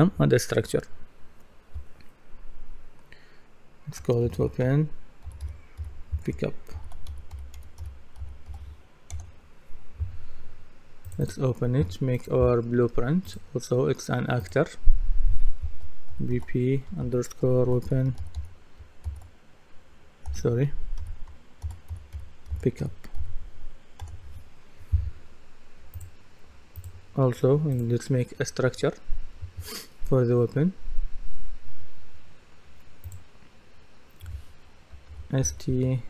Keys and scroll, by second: 4.0-9.0 typing, 9.1 Return, 16.1 shift+b, 17.5-19.1 typing, 20.3-23.7 typing, 24.0 Return, 35.1 shift+s, 35.4 shift+t.